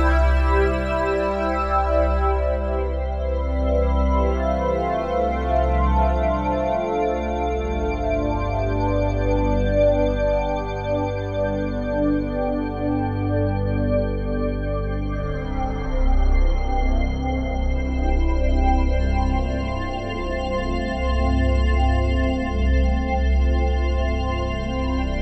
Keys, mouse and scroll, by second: 1.9 shift+click, 8.1 typing, 10.0 typing, 10.6 click, 11.0-14.7 drag, 13.1 space, 14.7 space, 15.1-18.0 drag, 15.5 space, 18.0 space, 19.2 ctrl+s, 19.7-25.2 ctrl+alt+drag.